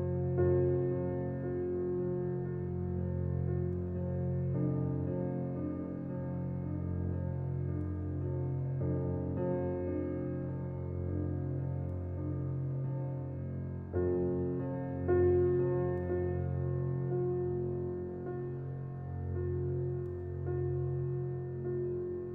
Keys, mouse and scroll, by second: 1.3-2.2 scroll down 9, 2.2-3.8 drag, 5.5 click, 5.8-7.1 middle drag, 7.1 shift+a, 8.5 g, 10.3-10.9 scroll up 3, 10.6 shift+middle click, 10.9 g, 12.3 s, 16.5-17.2 middle drag, 17.2 s, 18.6 Tab, 18.8-20.1 middle drag, 20.1 ctrl+r.